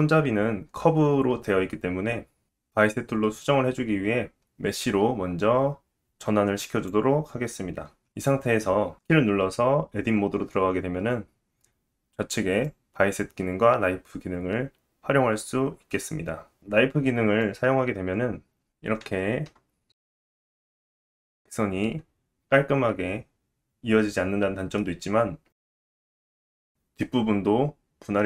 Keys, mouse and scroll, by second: 8.2 Tab, 8.2 scroll down 2, 8.9 Tab, 9.7-12.7 drag, 9.7-10.5 scroll up 1, 17.4 click, 19.0-19.5 scroll up 2, 19.7 shift+middle click, 20.3-20.7 scroll up 2, 20.8 shift+middle click, 21.6-22.6 scroll up 1.